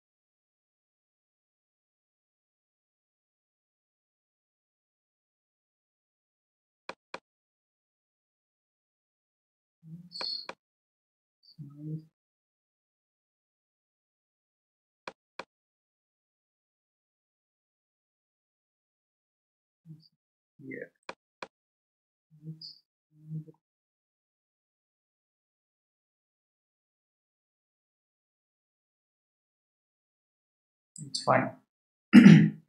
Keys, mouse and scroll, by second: 7.1-10.0 drag, 10.4-13.3 drag, 15.3-18.0 drag, 21.4-24.1 drag, 31.9 scroll down 1.